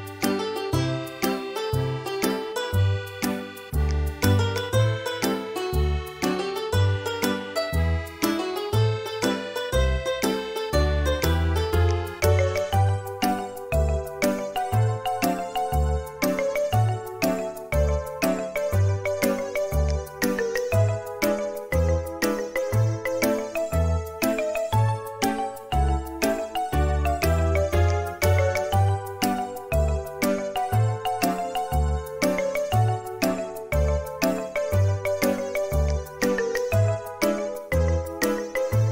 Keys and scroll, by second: 2.7 space, 4.2 b, 8.8 space, 13.3 ctrl+z, 19.3 space, 28.0 typing, 29.4-30.1 typing, 35.6 Escape.